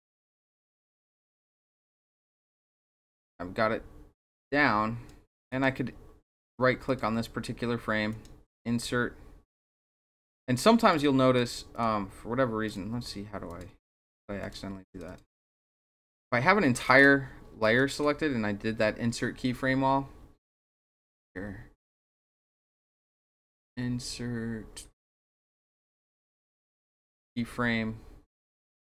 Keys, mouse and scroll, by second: 1.9-5.1 drag, 5.5 right click, 6.4 click, 6.9 click, 8.1 right click, 10.3 click, 10.9 click, 11.4 click, 11.7 click, 12.7 click, 13.5 click, 14.0 click, 14.4 click, 14.9 click, 15.1 click, 17.6 right click, 21.2 right click.